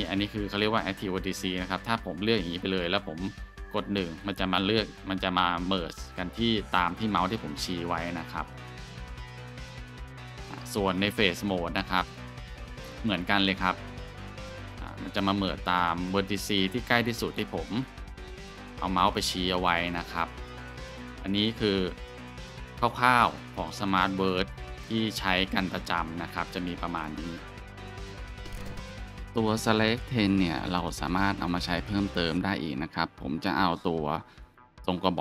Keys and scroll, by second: 3.8 shift+1, 4.5 ctrl+z, 5.2 1, 7.1 ctrl+z, 7.9 1, 8.7 ctrl+z, 9.4 1, 11.8 Tab, 14.0 1, 14.6 ctrl+z, 15.2 1, 19.0 ctrl+z, 21.2 ctrl+z, 24.8-25.1 scroll, 32.0 shift+a.